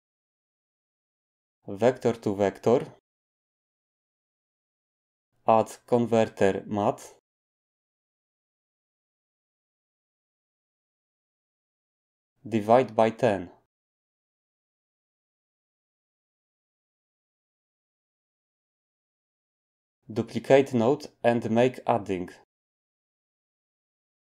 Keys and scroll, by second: 5.7 a, 18.4 typing, 19.2 Return, 21.6 d.